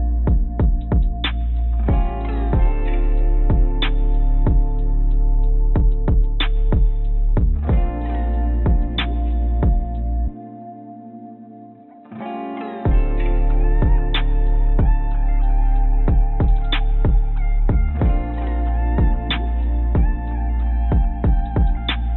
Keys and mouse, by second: 0.5 click, 1.4 Tab, 3.7 ctrl+z, 3.9 ctrl+z, 4.0 ctrl+z, 4.2 ctrl+z, 4.9 ctrl+z, 5.8 ctrl+b, 8.6 ctrl+b, 14.0-17.1 drag, 17.6-19.8 drag, 20.8-22.1 drag.